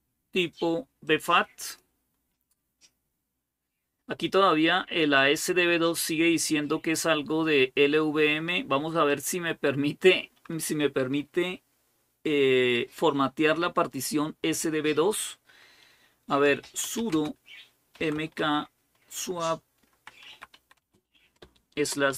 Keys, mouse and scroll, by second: 0.9-2.1 drag, 8.9 click, 16.2-18.2 typing, 19.7-22.1 typing.